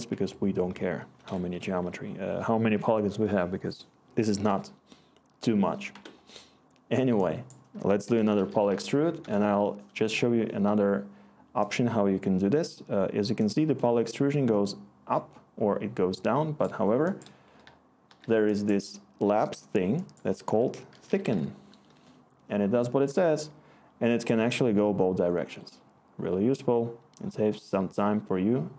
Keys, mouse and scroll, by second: 0.1 Tab, 1.2 Escape, 1.7 Tab, 5.9 Escape, 7.7 Tab, 7.8-9.2 typing, 18.0 Delete, 20.4 Tab, 20.6-21.8 typing, 21.9 Return.